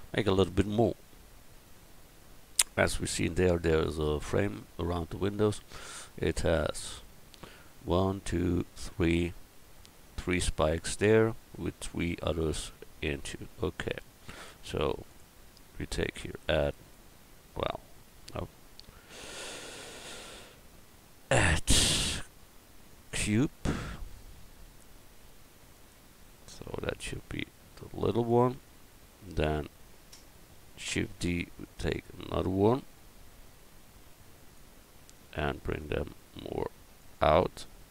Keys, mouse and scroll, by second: 1.5 KP_1, 15.1 click, 15.6 right click, 16.3 click, 16.9-18.2 right drag, 18.8 x, 21.2 click, 24.1 s, 26.3 s, 30.9 shift+d, 35.0 middle click, 35.7-37.9 drag.